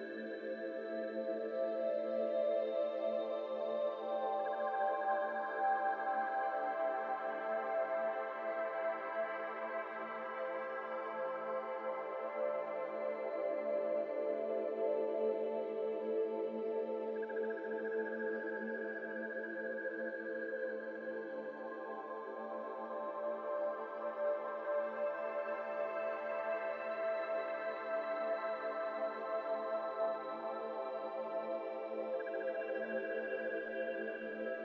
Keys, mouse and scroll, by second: 0.2-1.5 drag, 1.5 KP_0, 2.7-3.5 scroll down 2, 3.5 shift+d, 4.0 r, 7.1 g, 8.3 g, 8.4 g, 8.8 middle drag, 9.1-9.6 scroll up 5, 9.7-11.6 middle drag, 11.6 ctrl+s, 11.9 shift+middle click, 12.5-14.2 scroll up 4, 12.6-13.1 middle drag, 14.2-15.9 drag, 15.9 scroll down 2, 16.1 shift+middle click, 16.6-17.1 scroll up 4, 17.1 click, 17.7-18.4 scroll up 1, 18.4-22.0 drag, 22.0-23.4 scroll up 4, 22.3 middle click, 22.8 middle click, 23.4-24.1 drag, 27.2 middle drag, 27.4 scroll up 4, 27.7 middle click, 28.1 z, 28.6-29.0 shift+middle drag, 29.0 scroll up 2, 29.3 scroll down 1, 29.3 z, 29.3 middle drag, 29.5 scroll up 2, 30.0 shift+middle click, 30.7-31.4 scroll up 1, 31.4-34.6 drag.